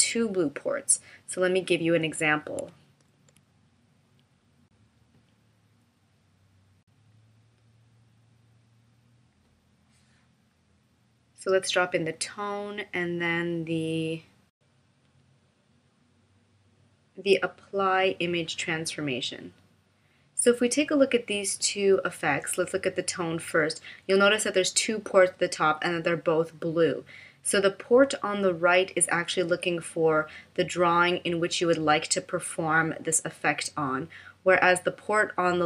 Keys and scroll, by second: 4.1 super+f.